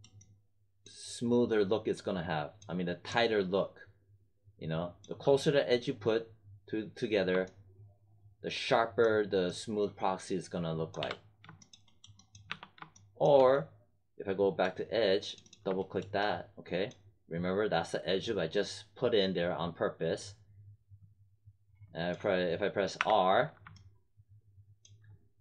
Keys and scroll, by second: 10.9 3, 12.4 1, 22.9 r.